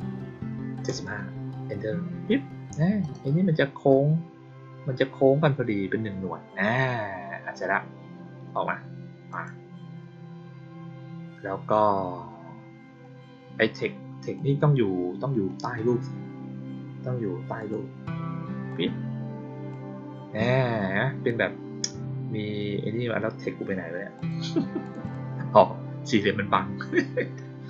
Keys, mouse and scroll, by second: 2.9 click, 9.2 click, 14.3 click, 17.5 click, 18.6-19.6 drag, 24.1 click, 24.8 click, 25.0 click, 26.0 click.